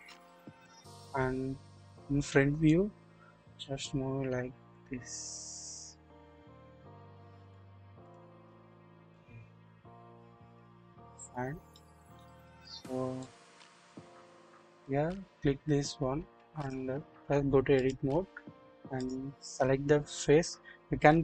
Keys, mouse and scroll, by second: 0.3 typing, 2.7-7.5 drag, 9.1 click, 11.4 scroll up 1, 11.7-12.3 shift+middle drag, 13.2 click, 14.7 click, 16.5-17.9 drag, 19.0 click.